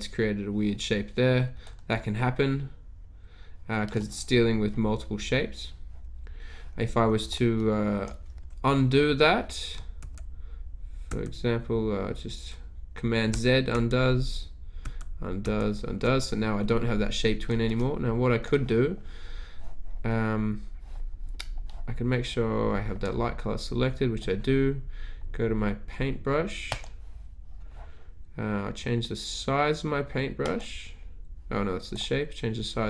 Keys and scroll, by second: 9.9 super+z, 11.1 super+z, 13.7 super+z, 14.9 super+z, 15.5 super+z.